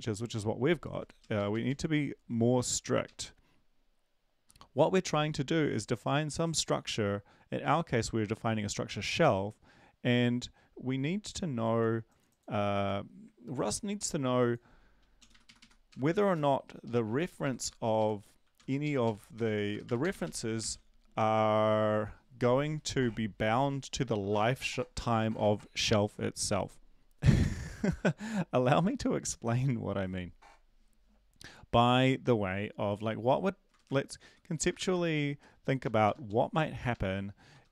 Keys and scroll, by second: 1.2 Down, 1.3 Down, 1.5 Down, 1.6-2.6 Down, 3.0 Down, 3.0 Up, 3.5-4.5 Up, 4.9 Down, 4.9 Up, 13.5 ctrl+`, 15.2 Down, 15.4 Right, 15.6 Right, 15.9-16.6 typing, 16.6 Left, 16.8 Left, 17.1 Up, 17.2 Left, 17.4 Left, 17.6 Left, 18.0 Right, 18.2-20.6 typing, 33.8 Return, 34.6 BackSpace, 34.7 BackSpace, 34.9 BackSpace, 35.4 Down, 35.8 Up, 36.0 BackSpace, 36.3 Down, 36.4 Down, 36.5 Down, 36.9 Up, 37.5 Return.